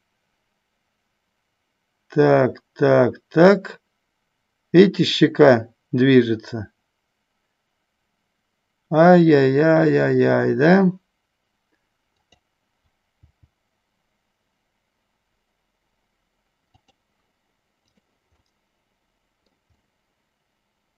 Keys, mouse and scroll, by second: 12.5 click, 17.9 click, 18.7 middle click, 19.9-20.9 middle drag.